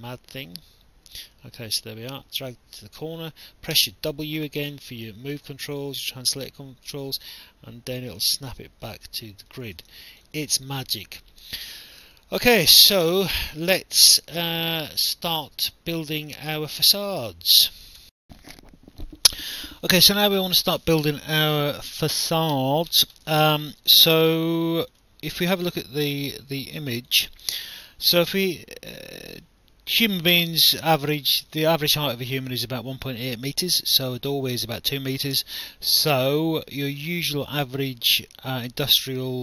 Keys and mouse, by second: 1.4 alt+click, 3.8 w, 4.8 alt+click, 7.1 click, 9.3 alt+click, 10.4 alt+click, 12.2 alt+click, 18.0 alt+F9, 23.8 alt+click, 27.0 click.